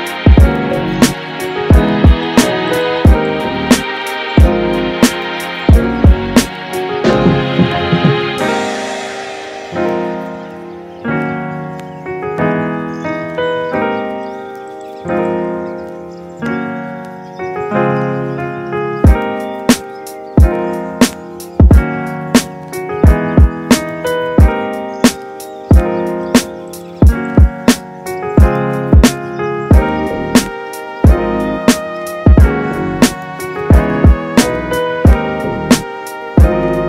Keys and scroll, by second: 4.1 space, 6.1 space, 11.0 space, 20.3 space, 24.5 space, 28.7 space.